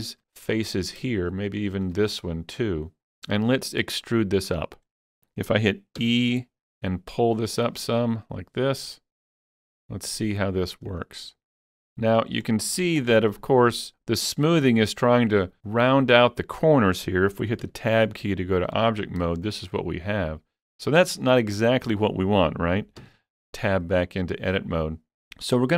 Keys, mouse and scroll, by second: 1.5 shift+click, 3.5-5.0 middle drag, 6.0-8.3 middle drag, 6.0 shift+click, 6.0 e, 10.9 click, 10.9 middle click, 10.9 e, 11.4 middle click, 12.5 shift+middle click, 13.1-13.4 scroll up 1, 18.2 Tab, 18.2 middle click, 19.0 scroll down 3, 19.4 shift+middle click, 19.8-21.8 shift+middle drag, 21.7-23.0 scroll up 3, 23.0 Tab.